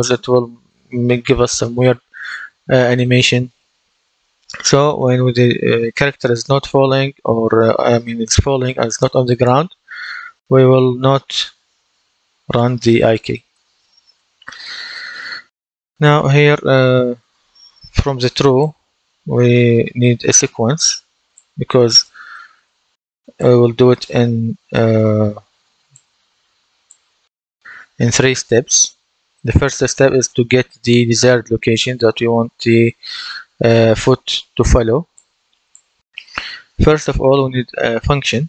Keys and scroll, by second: 19.6-20.8 typing.